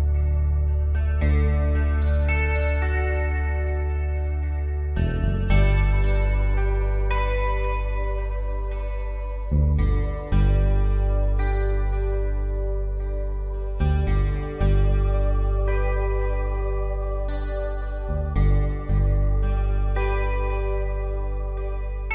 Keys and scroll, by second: 11.3-12.1 typing, 12.8 ctrl+0, 15.6 ctrl+t, 19.5 Up, 19.9 Left, 20.6 Up, 21.1 Return.